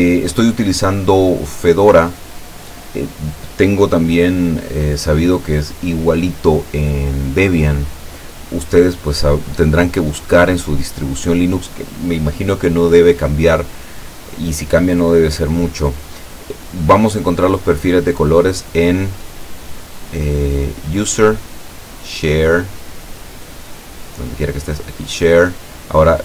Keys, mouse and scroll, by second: 0.0-2.4 drag, 20.9 click, 24.6 click.